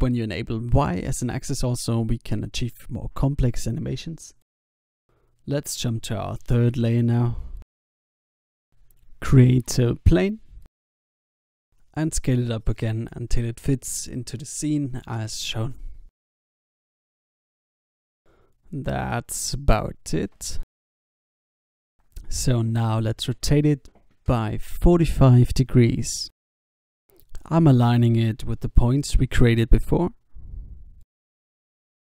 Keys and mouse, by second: 6.6 click, 7.6 shift+a, 12.8 s, 14.9 click, 15.8 s, 17.0 s, 22.7 r, 25.5 s, 26.7 click, 27.6 s, 31.2 Tab.